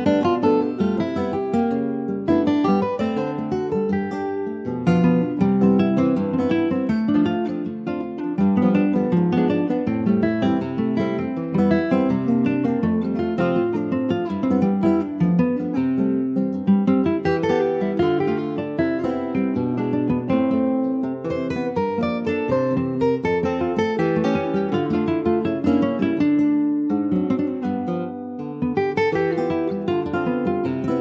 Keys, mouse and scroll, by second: 1.0 middle click, 1.4 click, 2.0-3.1 middle drag, 3.1 shift+click, 3.5-4.7 middle drag, 4.7 e, 5.2 alt+s, 6.9 middle click, 7.8 2, 8.1 click, 8.5 click, 9.0 middle click, 9.8-10.9 shift+drag, 10.9 ctrl+b, 15.2 middle click, 15.5 scroll up 1, 15.7-18.8 shift+middle drag, 19.5 click, 20.3 shift+middle click, 20.5 shift+scroll up 1, 20.7-21.7 middle drag, 21.7-22.9 shift+scroll up 2, 22.9-25.4 drag, 25.4-27.6 middle drag, 27.6-30.7 drag.